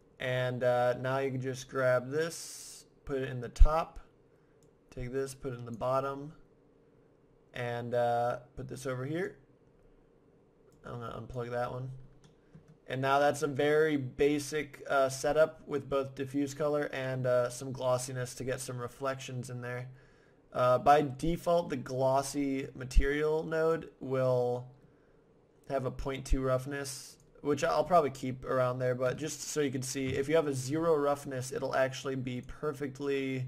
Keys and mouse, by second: 1.5-3.4 drag, 4.6-6.6 drag, 7.9-9.7 drag, 10.7-12.3 drag, 12.3 middle click, 13.4-15.2 drag, 15.2-18.1 drag, 19.3-20.3 middle drag, 22.6-24.5 drag, 27.1-29.1 drag, 32.4-33.4 drag.